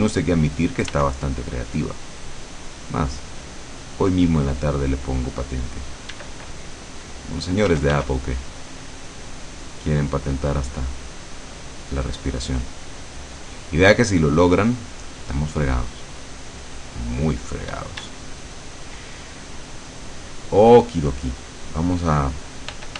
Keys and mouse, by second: 1.0 f, 6.2 d, 6.4 click, 7.8 f, 8.2-11.4 drag, 11.7-15.0 drag, 15.6-16.8 drag, 16.9-18.9 drag, 17.8 d, 19.6 middle click, 22.8 f.